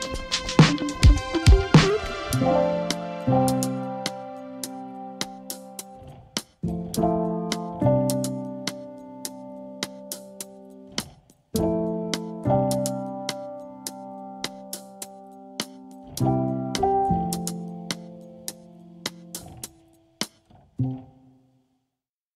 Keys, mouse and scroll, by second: 0.6 Return, 13.2-14.7 typing, 19.1 super+q, 22.2 click.